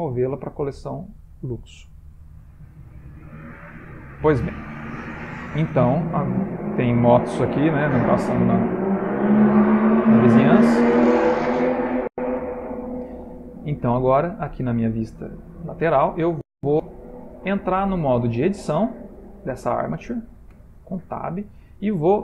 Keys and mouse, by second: 3.7 middle click, 5.0 middle click, 5.9 click, 6.4 middle click, 7.0 shift+middle click, 7.6 middle click, 7.7 middle click, 8.5 shift+middle click, 9.4 middle click, 10.0 shift+middle click, 11.9 middle click, 14.1 click, 15.4 middle click, 17.2 click, 20.7 Tab.